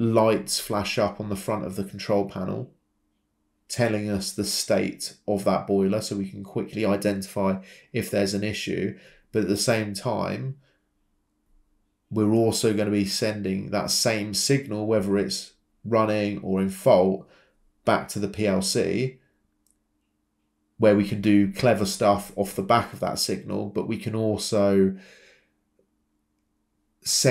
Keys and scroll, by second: 18.6 typing, 19.0 Return, 20.4 Escape.